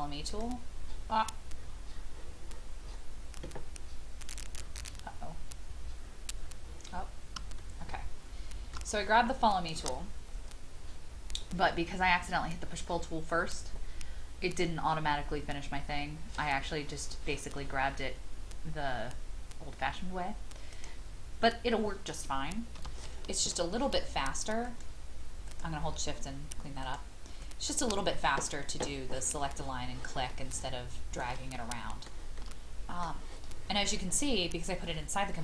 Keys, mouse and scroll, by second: 1.5-2.4 scroll down 1, 2.4 scroll up 1, 4.5-6.3 scroll down 1, 7.6 shift+middle click, 20.7 click, 22.8 e, 24.6 shift+click, 25.4 shift+click, 26.8 shift+click, 27.4 shift+click, 30.3 middle click, 31.5 shift+middle click, 32.4 shift+middle click.